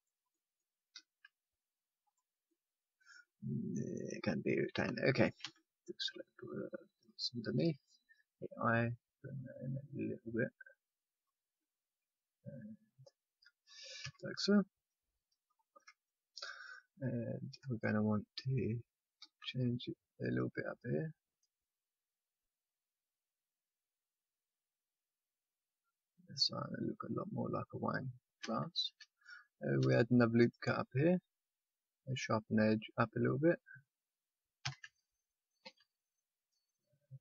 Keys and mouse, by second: 0.0 right click, 0.3-2.0 middle drag, 0.9 ctrl+r, 2.4-4.1 middle drag, 4.4-8.3 drag, 5.4 c, 8.3 i, 14.0 a, 19.1 ctrl+r, 23.3 middle click, 28.4 a, 29.7 ctrl+r, 34.6 a, 35.6 ctrl+r.